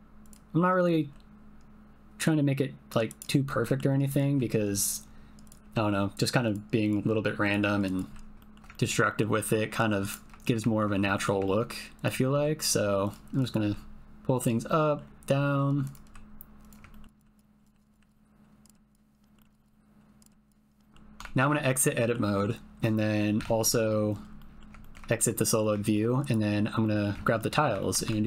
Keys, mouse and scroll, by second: 0.8 click, 1.2 g, 3.1 click, 3.6 middle click, 4.1 click, 4.4 g, 4.8 click, 5.6 g, 6.4 click, 7.0 g, 7.4 click, 7.8 click, 8.1 g, 8.4 shift+middle click, 8.8 ctrl+click, 9.1 click, 9.3 g, 11.1 shift+middle click, 11.5 ctrl+middle click, 12.0 click, 12.3 g, 13.0 click, 14.3 click, 14.3 g, 14.8 middle click, 15.8 click, 16.0 g, 16.6 click, 16.9 ctrl+middle click, 17.3-20.1 typing, 17.7 click, 18.1 click, 18.8 click, 19.3 click, 19.6 click, 20.7 click, 20.8 ctrl+click, 21.2 Tab, 21.8 click, 24.3 middle click, 24.8 ctrl+middle click, 25.4 middle click, 25.8 shift+middle click, 26.2 click, 26.8 middle click, 27.2 ctrl+middle click, 27.8 shift+middle click, 28.1 Tab.